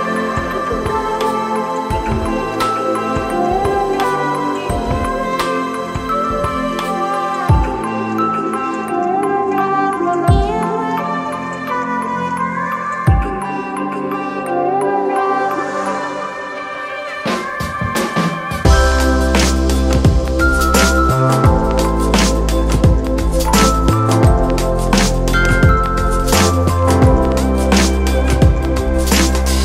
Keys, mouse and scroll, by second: 8.4 [.